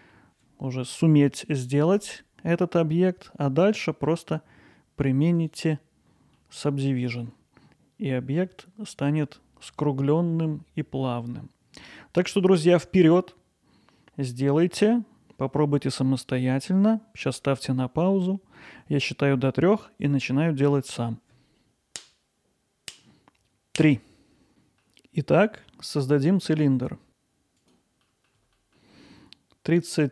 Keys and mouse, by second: 5.4 click, 6.4 alt+middle click, 10.4-11.8 alt+middle drag, 12.7-13.2 drag, 26.6 shift+a.